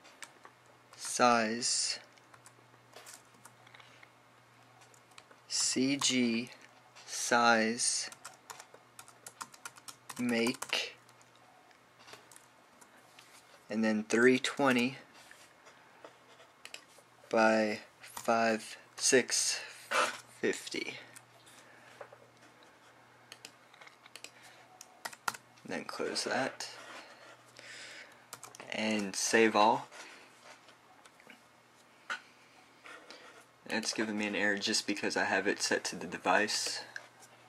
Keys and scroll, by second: 0.0-0.6 typing, 1.7 typing, 3.1 typing, 4.2 Right, 6.1-6.9 typing, 8.6-11.9 typing, 13.6 Right, 14.8-16.0 typing, 19.0 6, 20.9 typing, 21.9 typing, 25.9-26.2 typing, 28.3-29.2 typing, 29.2 super+b, 32.4 typing.